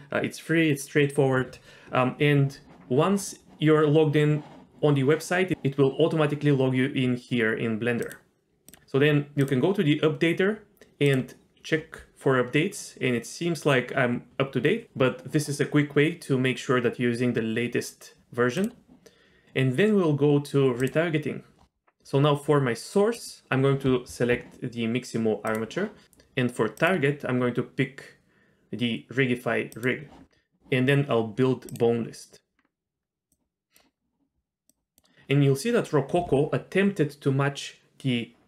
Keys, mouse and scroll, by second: 8.0 click, 8.7 click, 9.4 click, 11.0 click, 18.6 click, 19.4 click, 20.8 click, 23.1 click, 26.8 click, 31.7-32.8 drag, 33.3 click, 34.7 click.